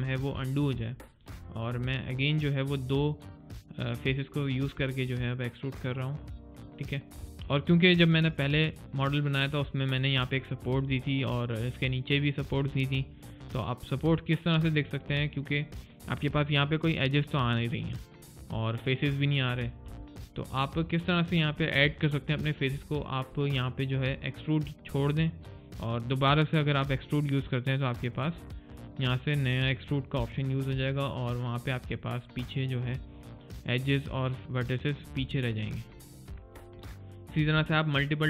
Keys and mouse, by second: 0.4 alt+click, 0.9 alt+middle click, 1.3 alt+click, 1.7 alt+middle click, 2.0 alt+right click, 4.9 alt+click, 11.0 alt+middle click, 12.6 alt+click, 13.0 alt+right click, 13.5 alt+middle click, 14.0 alt+click, 14.5 alt+middle click, 15.0 alt+click, 15.6 alt+middle click, 19.9 alt+middle click, 20.2 alt+click, 20.7 alt+middle click, 23.2 alt+click, 27.1 alt+click, 30.7 alt+click, 31.5 alt+right click, 31.8 alt+click, 32.3 middle click, 36.6 alt+middle click, 37.0 alt+click.